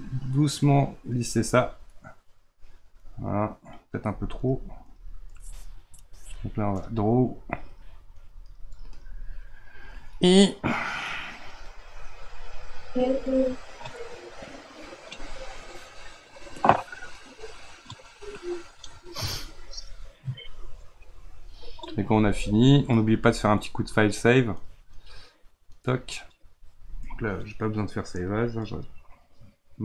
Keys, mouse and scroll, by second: 2.0-4.5 middle drag, 4.5 click, 10.1-16.4 middle drag, 17.3-20.4 middle drag, 22.5 click, 24.9-28.1 drag.